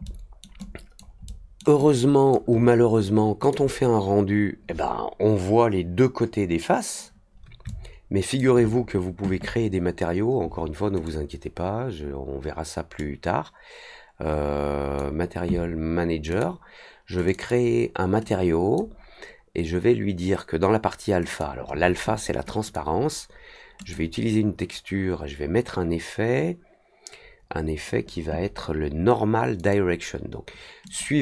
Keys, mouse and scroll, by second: 0.0 alt+middle click, 0.5 alt+click, 1.2 alt+middle click, 1.7 alt+click, 3.4 click, 7.6-8.3 alt+drag, 11.0-14.9 drag, 16.2 click, 17.2 click, 17.3 click, 18.2 click, 21.2 click, 22.6 click, 23.7 click, 29.5 click, 30.8 click.